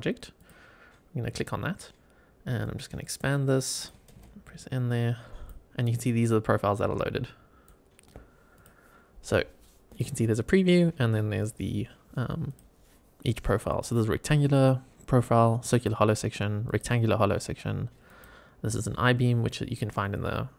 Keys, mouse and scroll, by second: 0.3 click, 1.1-2.5 scroll down 4, 2.5 click, 2.5 scroll down 1, 3.6 click, 4.1 n, 4.8 click, 6.7-7.7 drag, 8.5 click, 9.8 click, 12.4 click, 13.6 click, 15.6 click, 16.6 click, 18.0 click.